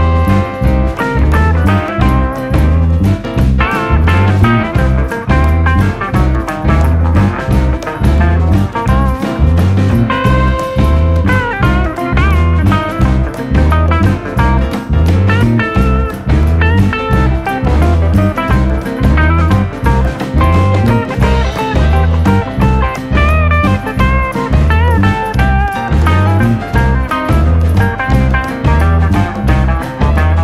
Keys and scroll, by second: 6.3 d, 10.0 2, 11.4 Return, 14.9 2, 15.2 Return, 17.6 2, 17.8 Return, 20.8 2, 21.0 Return, 23.0 Escape.